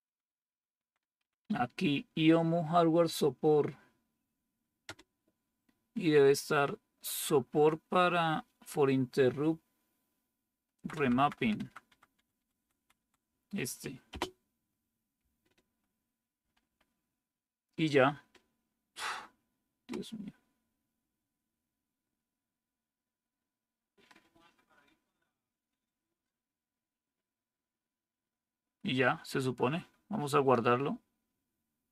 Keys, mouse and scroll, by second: 0.1 Down, 0.3 Down, 1.1 Down, 1.1 Up, 1.3 Up, 4.7 Return, 10.7 Down, 10.9 Down, 11.0-11.5 Down, 11.8 Down, 12.0 Down, 12.4 Down, 12.7 Down, 12.8 Down, 14.0 space, 16.3 Down, 16.5 Down.